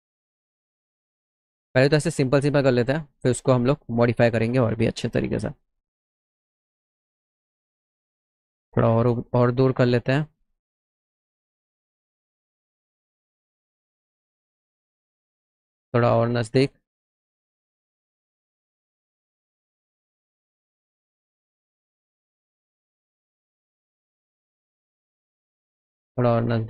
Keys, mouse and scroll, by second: 3.4 shift+click, 9.5 shift+click, 11.6 click, 13.0 click, 16.2 shift+click, 18.6 click, 20.6 click, 25.4 shift+click.